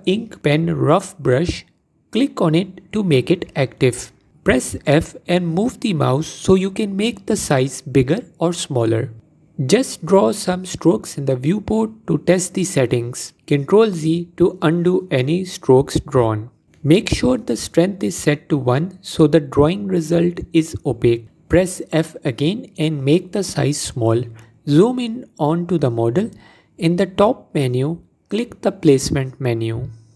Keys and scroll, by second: 4.5 f, 12.0 ctrl+z, 12.9 ctrl+z, 21.1 f, 24.7 f.